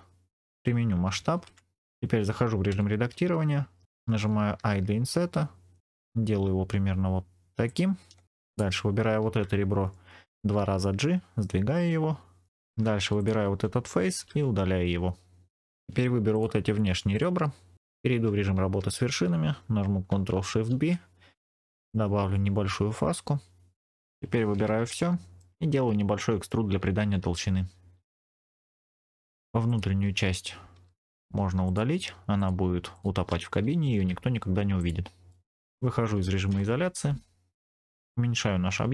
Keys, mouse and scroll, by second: 0.5 click, 1.2 ctrl+a, 2.6 Tab, 4.5 i, 7.6 click, 8.4 click, 10.3 g, 10.5 g, 12.5 click, 12.5 2, 12.9 3, 13.1 click, 14.1 x, 16.2 click, 17.0 shift+click, 18.7 1, 20.6 ctrl+shift+b, 23.9-24.4 scroll down 2, 24.4 a, 24.9 middle click, 25.6 e, 28.9 click, 29.0 middle click, 29.6 click, 30.7 3, 30.9 click, 31.5 shift+click, 32.3 shift+click, 32.8 shift+click, 33.9 x, 35.2 middle click, 35.6 Tab, 35.6-36.4 scroll down 3, 36.4 KP_Divide, 37.9-38.6 scroll up 2, 38.6 s.